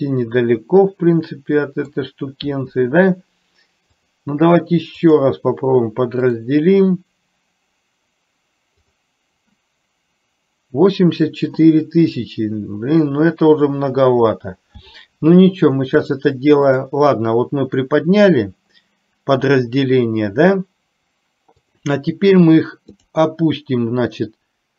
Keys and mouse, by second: 4.0-5.5 drag, 6.7-9.5 right drag, 16.2-17.0 drag, 21.8 click, 23.0-24.7 drag.